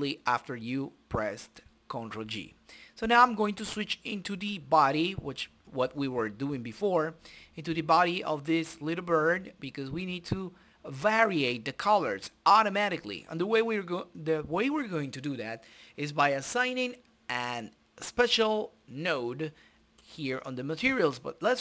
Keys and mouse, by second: 0.3 click, 1.6 KP_Decimal, 2.5 click, 2.9-4.3 middle drag, 4.3-7.1 drag, 7.1-9.6 middle drag, 10.1 click, 11.0 Delete, 11.4-12.6 middle drag, 12.6 click, 13.7 click, 14.6-16.6 drag, 16.4-17.4 middle drag, 17.9 shift+z, 19.4 click.